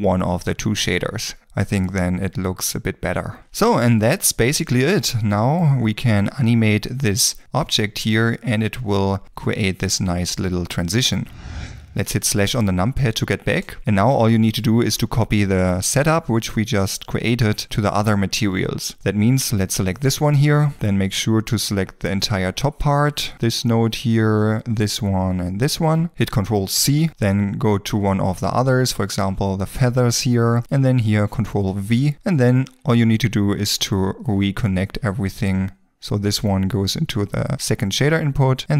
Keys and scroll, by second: 6.0 g, 12.1 /, 20.5 ctrl+space, 31.7 ctrl+v, 32.1 ctrl+space.